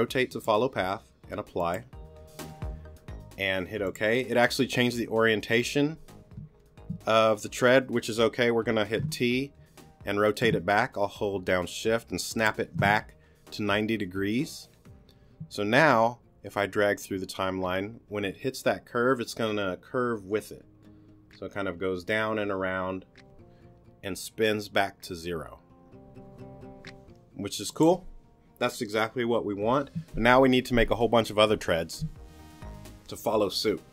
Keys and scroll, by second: 9.0 t.